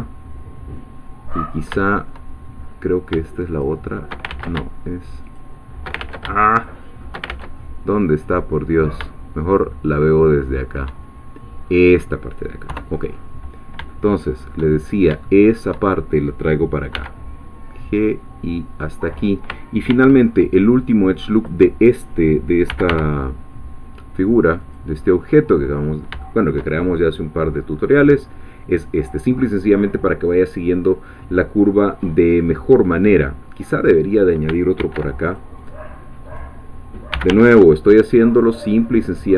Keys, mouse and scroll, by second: 1.3-1.7 scroll up 1, 1.8-2.6 shift+middle drag, 3.6 shift+click, 4.3 ctrl+shift+z, 5.2 shift+click, 6.0 ctrl+shift+z, 6.6 ctrl+shift+click, 7.3 ctrl+shift+z, 8.2-8.9 middle drag, 11.7 click, 12.7 3, 13.6-13.9 scroll down 3, 13.9 shift+middle click, 14.8 shift+scroll up 2, 15.3 shift+middle click, 16.9 g, 18.8 click, 19.9 ctrl+r, 20.5 ctrl+click, 20.8-22.7 ctrl+drag, 22.4-23.4 typing, 24.6 click, 25.0-25.5 scroll down 1, 25.7 scroll down 1, 26.2 shift+middle click, 26.3-26.7 shift+scroll down 1, 27.0 shift+scroll down 1, 27.7-28.1 scroll up 2, 28.3 scroll down 2, 28.9 scroll up 2, 31.6-32.1 scroll down 2, 32.3-32.7 scroll up 2, 34.8 ctrl+r, 35.3 ctrl+click, 36.2 click, 36.9-37.8 typing.